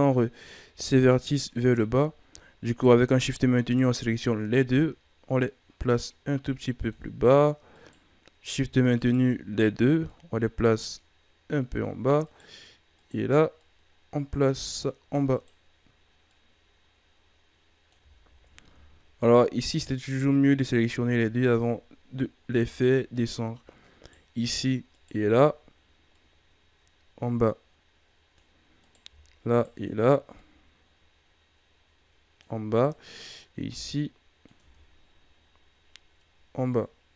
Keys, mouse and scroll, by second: 1.0 shift+right click, 2.6 right click, 3.5 shift+right click, 4.7-7.7 drag, 7.7 right click, 8.9 shift+right click, 10.0-12.2 drag, 12.2 right click, 12.9 right click, 13.5-15.3 drag, 15.3 right click, 16.2-18.2 drag, 18.2 ctrl+z, 19.1 shift+right click, 20.0-21.0 drag, 21.0 Tab, 21.2-22.0 scroll down 5, 22.0-22.5 scroll up 5, 22.5 Tab, 24.0 right click, 24.9 shift+right click, 26.0-28.8 drag, 28.8 right click, 29.4 shift+right click, 30.3-32.6 drag, 32.6 right click, 33.3-34.6 drag, 34.6 Tab, 34.9-36.1 scroll down 8, 36.3 scroll down 2.